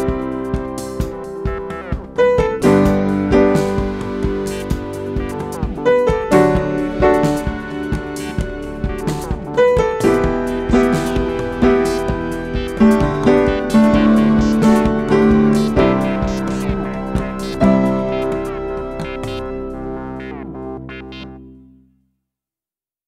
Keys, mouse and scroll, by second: 3.0 ctrl+g, 5.3 click, 8.9 F9, 13.6 F9, 14.1 ctrl+F7, 19.5 ctrl+F7, 23.0 ctrl+F7.